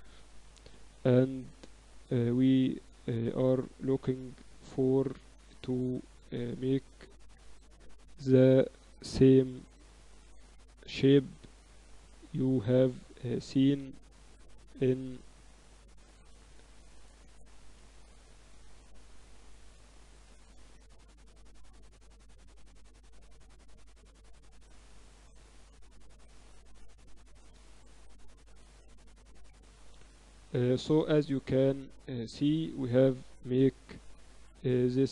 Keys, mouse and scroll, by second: 1.7-3.7 drag, 6.9 a, 7.7 v, 9.1 b, 10.7 b, 12.6 a, 12.9-14.9 right drag, 13.5 s, 17.6 a, 17.9-19.1 right drag, 19.1-20.7 drag, 20.2 ctrl+z, 23.3 click, 25.5-27.7 right drag, 28.5 right click, 29.3-30.4 drag, 29.7 Tab, 30.2 Tab, 31.2 a, 33.5-35.1 typing.